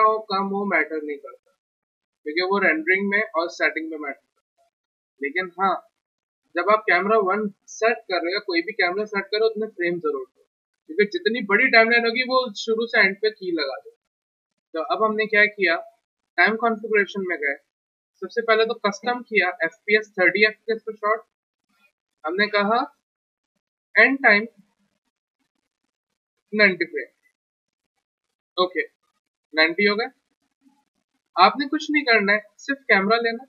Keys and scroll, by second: 26.6-27.0 typing, 31.0 w, 32.1-32.8 typing.